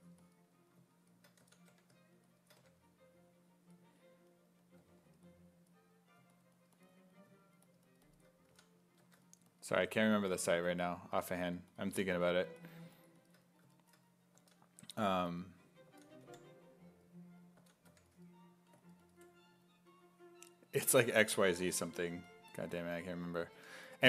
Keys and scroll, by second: 1.4 s, 1.7 1, 4.8 1, 8.5 s, 9.0 1, 10.2-12.6 typing, 14.4 s, 14.8 1, 15.9 s, 16.3 5, 17.6 s, 17.9 1, 21.6 s, 21.9 1, 23.6 1.